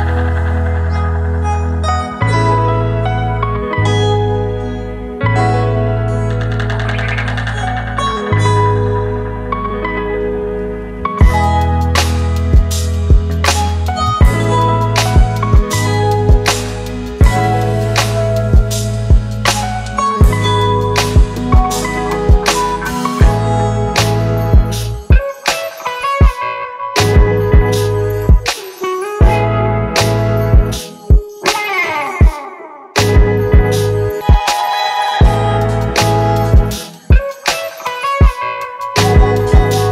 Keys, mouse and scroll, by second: 0.9 double click, 9.0 alt+scroll up 1, 11.4 alt+right click, 16.5-19.0 scroll down 1, 23.7-24.9 typing, 30.1 double click, 37.6 ctrl+-.